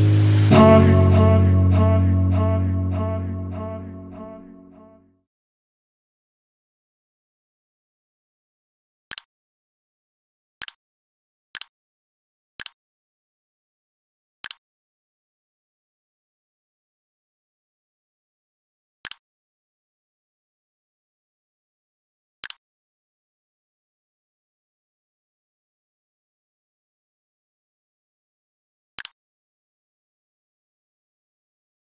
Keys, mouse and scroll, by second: 2.7 click, 4.4 click.